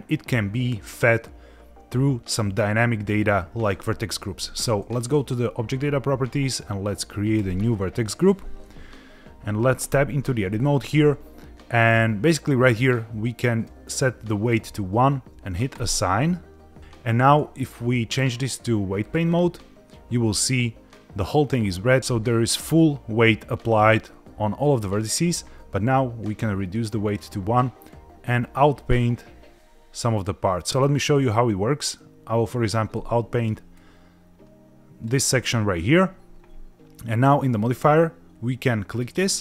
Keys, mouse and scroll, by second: 5.1 click, 7.3 click, 9.9 Tab, 13.6 click, 15.7 click, 16.8 click, 17.6-19.3 drag, 24.0 middle click, 26.3 click, 27.9 click, 30.9 click, 32.9 middle click, 33.7 click, 37.3 click, 38.8 click.